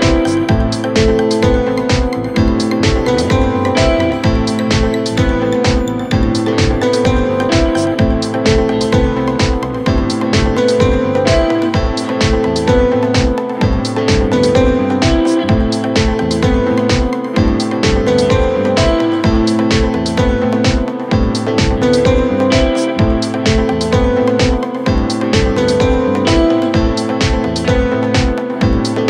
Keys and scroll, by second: 9.4 ctrl+Page_Down, 10.0 F3, 15.0 shift+F2, 15.8 Right, 22.7 Escape, 28.7 g.